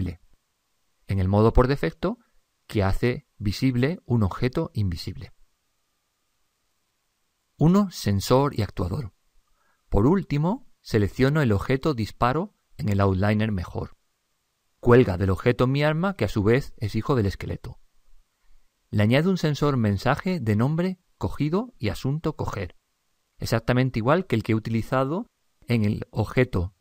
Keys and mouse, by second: 7.9 click, 10.5 click, 14.3-17.2 drag, 21.6 click, 22.2 click, 25.9-26.8 middle drag.